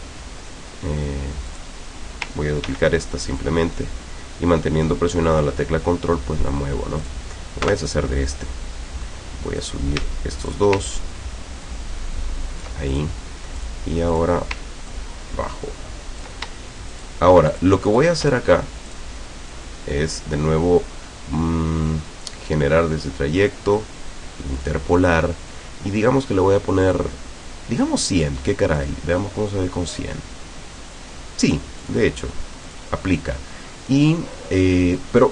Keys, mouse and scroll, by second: 1.5 click, 2.7 ctrl+d, 3.5-5.4 ctrl+drag, 5.5-6.6 ctrl+drag, 7.1 click, 7.7 Delete, 9.7 click, 10.5 shift+click, 10.9-13.2 ctrl+shift+drag, 13.6 click, 14.1 click, 14.9-16.5 ctrl+drag, 16.9 shift+click, 17.5 shift+click, 17.9 shift+click, 18.9 click, 24.6 click, 28.7 click, 30.0 click, 31.9 click, 32.7 click, 34.0-35.3 middle drag.